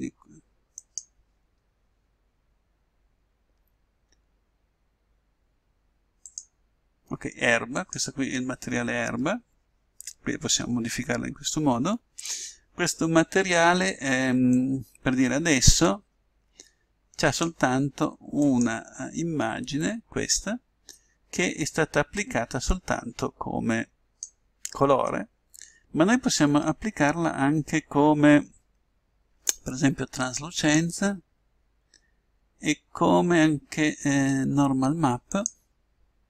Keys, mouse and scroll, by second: 6.3-8.1 drag, 14.5-16.3 drag, 18.5-20.1 drag, 22.2-23.9 drag, 30.7-32.3 drag, 35.5-36.2 drag.